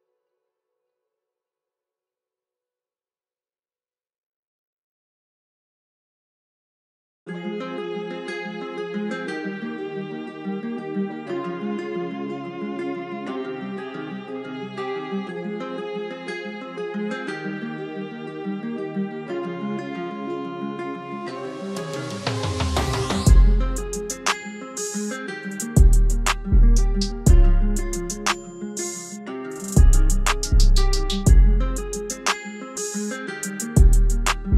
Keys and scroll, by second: 0.1 ctrl+a, 2.5 F4, 17.3 F3, 29.7 ctrl+z.